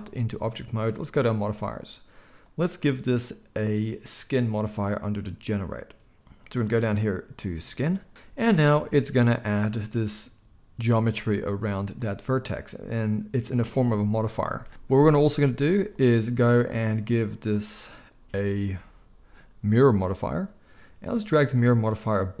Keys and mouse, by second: 1.1 click, 1.2-2.4 middle drag, 2.4-22.4 drag.